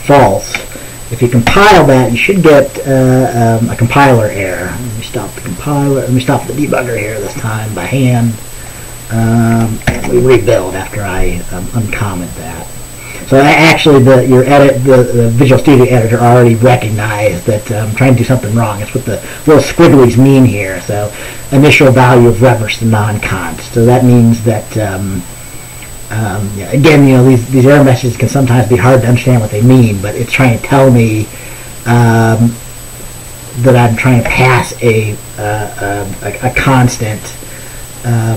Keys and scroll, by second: 1.5 BackSpace, 1.6 ctrl+s, 10.0 ctrl+b.